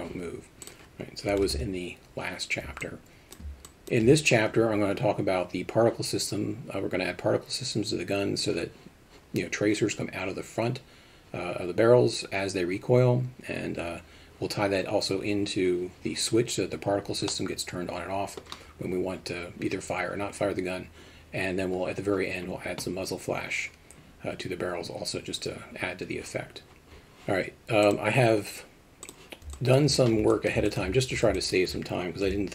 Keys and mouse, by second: 0.6-2.2 drag, 2.8-3.4 alt+middle drag, 3.6 alt+shift+middle drag, 17.3-18.3 middle drag, 27.9 click, 29.5 alt+middle drag, 30.3 alt+middle drag, 30.7 alt+shift+middle drag, 31.1 alt+a, 31.3 alt+middle drag, 32.2 KP_Divide.